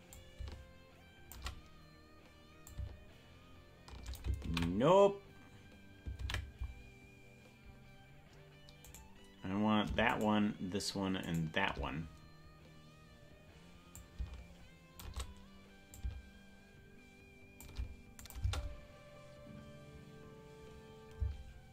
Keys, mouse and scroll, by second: 0.1-1.4 drag, 2.6-4.2 drag, 5.4 ctrl+z, 7.1 ctrl+z, 9.1-11.1 right drag, 13.9-15.0 drag, 15.9-17.6 drag, 18.2 click, 18.5 space, 21.2 space.